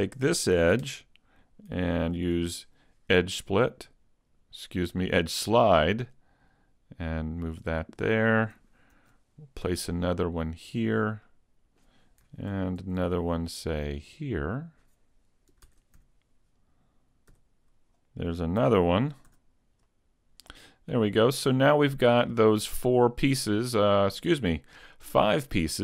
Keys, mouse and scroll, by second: 2.4 ctrl+e, 7.6 click, 7.8 middle click, 9.0 ctrl+r, 10.9 click, 11.2 middle click, 12.8 ctrl+r, 15.7 ctrl+Tab, 16.6 right click, 17.3 x, 18.6 a, 19.3 a, 19.9 middle click, 20.4 Tab, 21.8 scroll up 1, 22.0-22.6 scroll down 2, 22.8 middle click.